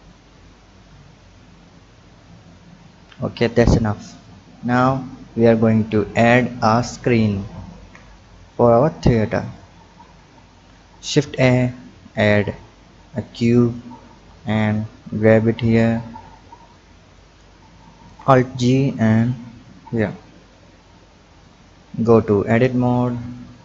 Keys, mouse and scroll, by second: 0.1 click, 4.5-7.5 scroll down 2, 7.8 KP_7, 9.5 click, 10.4-11.2 scroll up 2, 11.2 shift+a, 15.1-18.0 drag, 18.0 alt+g, 19.0-22.1 drag, 22.1-22.6 scroll up 4, 22.6 Tab, 23.0 click.